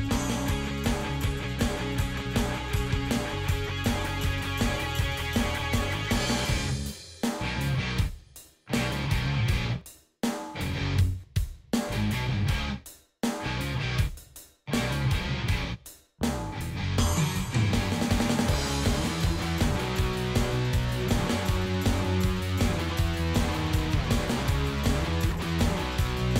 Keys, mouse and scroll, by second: 0.8 click, 1.8 click, 2.3 ctrl+s, 3.3 click, 5.2 Escape, 7.3-10.0 drag, 10.5 click, 14.2 click, 17.9-21.2 drag, 22.2 click, 24.7 click, 25.2 click.